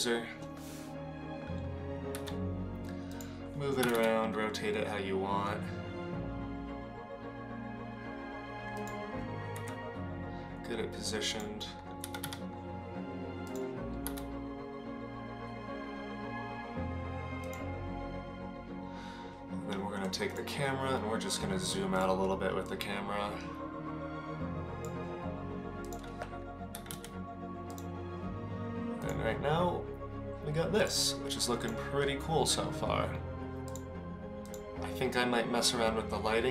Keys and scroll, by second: 2.3 g, 3.8 r, 9.7 s, 12.2 r, 14.0 r, 26.7 g.